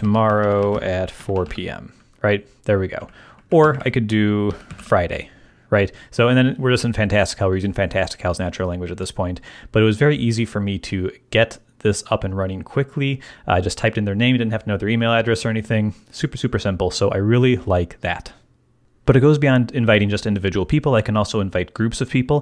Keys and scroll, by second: 0.0-1.9 typing, 2.9 Left, 3.6 alt+shift+Left, 4.4-5.2 typing.